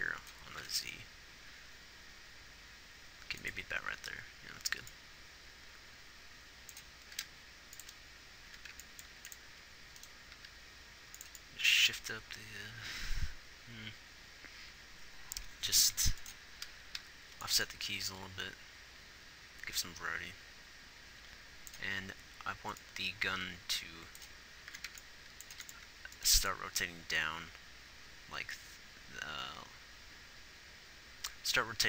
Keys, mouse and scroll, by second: 0.9 g, 7.4 g, 9.6 a, 9.6 b, 9.6 x, 17.3 g, 26.6 x, 27.5 click.